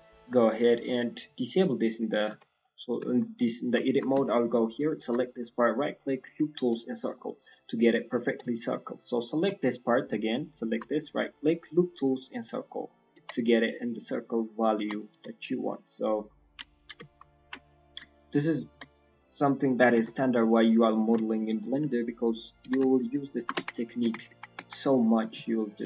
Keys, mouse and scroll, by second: 0.0 click, 0.0 scroll up 4, 2.2 z, 2.5 middle click, 3.0 shift+middle click, 3.3 middle click, 3.5 scroll up 1, 4.1 shift+middle click, 4.7 shift+click, 5.5 right click, 6.9 scroll down 3, 7.1 middle click, 7.4 middle click, 8.4 scroll up 2, 8.5 alt+click, 9.7 middle click, 10.5 shift+middle click, 10.9 right click, 12.8 middle click, 13.3 Tab, 13.3-14.0 scroll down 3, 13.6 middle click, 14.3 middle click, 14.6 scroll, 14.7 scroll up 2, 14.8 Tab, 15.1 s, 16.2 scroll down 2, 16.7 KP_1, 17.0 KP_3, 17.3 KP_1, 17.6 scroll up 1, 19.9 scroll, 19.9 KP_3.